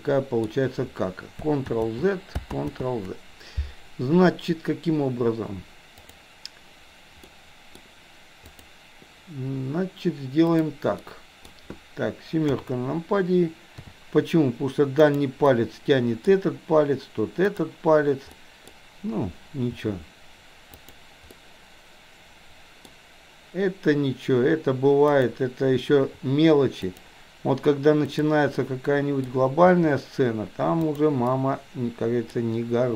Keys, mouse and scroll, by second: 1.7 ctrl+z, 6.0 click, 7.3-7.7 middle drag, 8.6 drag, 10.6 click, 11.1-11.6 middle drag, 12.6 KP_7, 13.8 r, 15.6 middle click, 18.3-18.7 middle drag, 19.8 r, 21.5-22.8 middle drag, 25.3 click, 26.1 r, 28.1 click, 28.6-29.2 middle drag, 29.7 r, 31.2-32.3 middle drag.